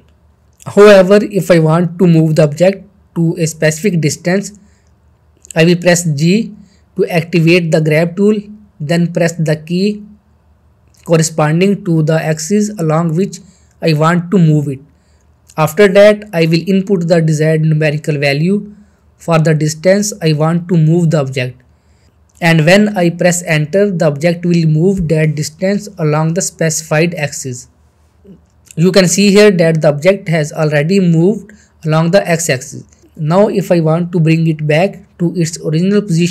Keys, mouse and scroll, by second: 1.9 ctrl+z, 2.5 middle click, 2.9-3.5 shift+middle drag, 7.6 g, 9.5 x, 19.2 x, 19.3 scroll down 1, 19.5-20.1 middle click, 20.3 shift+scroll down 1, 20.5-21.5 shift+middle drag, 31.1 click, 33.9 click, 34.0 click, 34.6-35.3 middle click.